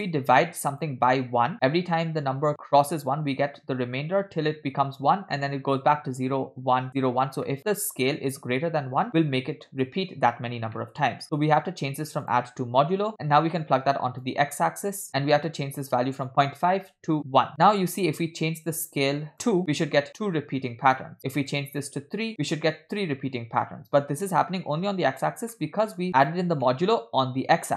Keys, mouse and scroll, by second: 0.4 click, 0.6 click, 7.5 middle click, 7.6 scroll down 1, 9.9 middle click, 10.8 middle click, 12.3-13.1 drag, 13.2-14.5 drag, 14.9 click, 16.3 click, 17.5 middle drag, 19.0 shift+click, 21.5 shift+click, 25.6 middle click, 26.2 click, 26.7 middle click.